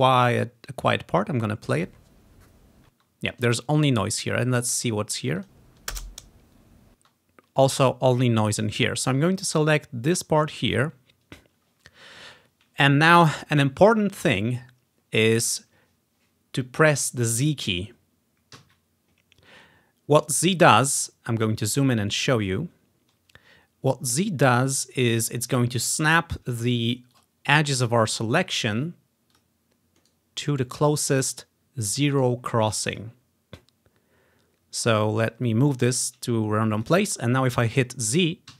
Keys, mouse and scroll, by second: 1.8 click, 2.3-3.6 drag, 3.0 space, 5.5 click, 7.0 space, 7.7-12.4 drag, 18.6 z, 21.5-23.2 ctrl+scroll up 3, 23.2-23.9 ctrl+scroll up 1, 25.0-26.4 right drag, 27.2-28.7 drag, 28.6 right click, 29.4-31.0 drag, 29.5 right click, 30.2 right click, 31.8 click, 33.0 click, 35.6-37.2 drag.